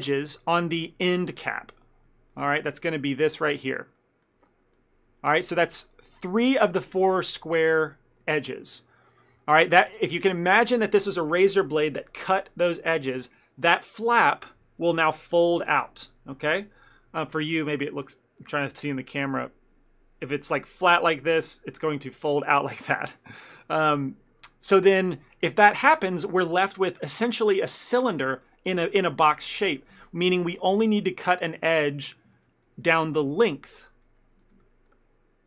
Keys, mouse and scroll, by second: 2.4 ctrl+click, 4.1 middle click, 4.5 shift+middle click, 6.0 ctrl+click, 6.4 ctrl+middle click, 9.5 shift+middle click, 24.5 middle click, 30.7 shift+middle click, 31.0 ctrl+middle click, 32.2 shift+click, 32.5 ctrl+middle click, 32.8 middle click, 33.1 ctrl+middle click, 34.5 shift+middle click, 34.7 ctrl+middle click.